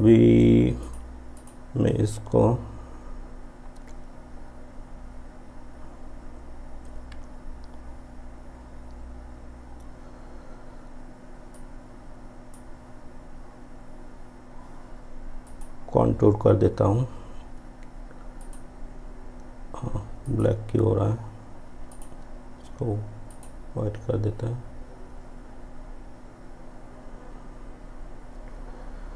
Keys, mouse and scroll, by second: 11.6-15.1 drag, 15.5 click, 18.5 click.